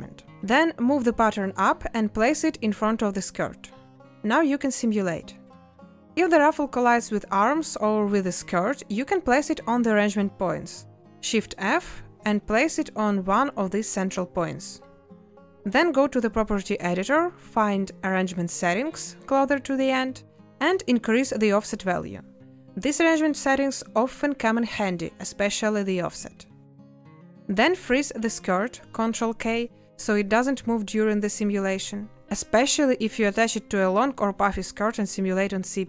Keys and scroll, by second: 28.2 shift+a.